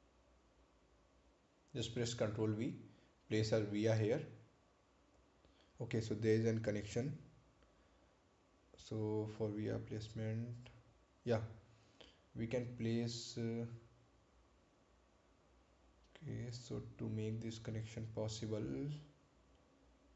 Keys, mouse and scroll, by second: 3.2 ctrl+click, 3.8 ctrl+v, 6.3 click, 8.6 ctrl+z.